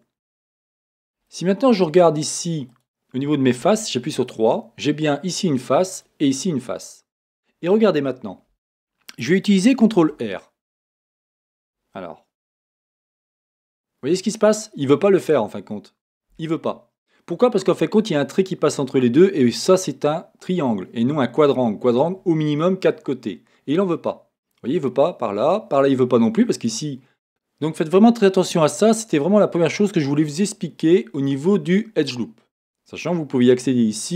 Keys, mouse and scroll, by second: 0.2 Tab, 2.2 click, 2.7 click, 2.8-4.2 middle drag, 3.6 3, 4.2 click, 4.3-5.9 middle drag, 5.9 click, 6.0-9.1 middle drag, 10.0 ctrl+r.